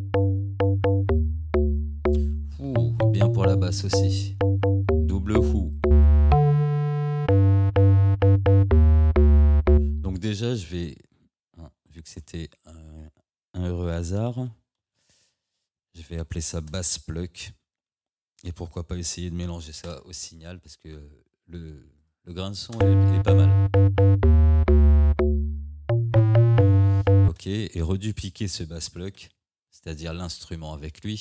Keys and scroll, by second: 12.2 ctrl+r, 13.7 b, 16.7 space, 17.2 p, 19.9 Return, 27.3 space, 29.2 ctrl+d.